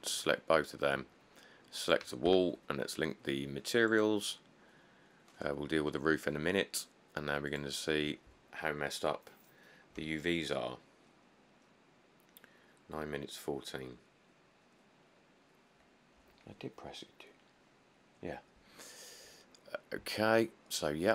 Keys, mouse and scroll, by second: 2.5 q.